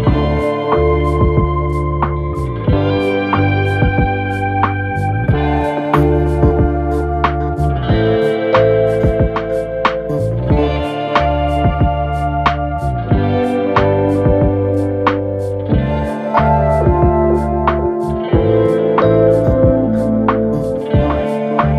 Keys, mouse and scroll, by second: 0.5-0.8 scroll up 2, 1.9 click, 3.2 click, 3.6-4.1 scroll down 2, 4.1 KP_1, 4.9 shift+middle click, 5.3-6.2 scroll up 1, 6.2 e, 8.6 ctrl+KP_Add, 9.2-10.8 right drag, 10.8-11.2 drag, 11.2 scroll up 1, 11.7 click, 12.6 g, 14.3 click, 14.5 g, 15.9 click, 16.2 g, 17.1 click, 18.4 f, 19.1 KP_3, 20.2-21.7 right drag.